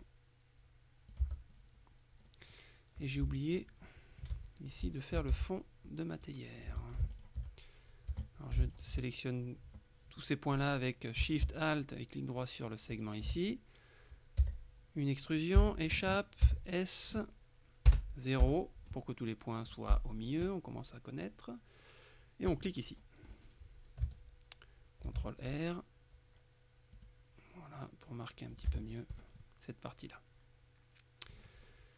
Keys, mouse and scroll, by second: 0.0 click, 1.2 click, 1.3 Tab, 2.6 click, 3.3 shift+click, 3.9 shift+click, 4.5 click, 4.9 shift+click, 5.4 shift+Tab, 5.6 shift+right click, 6.3 right click, 6.8 a, 7.2 alt+shift+right click, 8.2 a, 8.7 alt+shift+right click, 12.5 alt+shift+right click, 14.5 e, 15.7 Escape, 16.5 s, 18.0 KP_0, 18.5 KP_Enter, 22.6 click, 22.9-23.3 scroll down 2, 23.3-23.9 scroll up 2, 25.1 ctrl+r, 27.0 click, 28.6 click, 28.7 Tab, 28.9-29.3 scroll down 2, 29.5 middle click.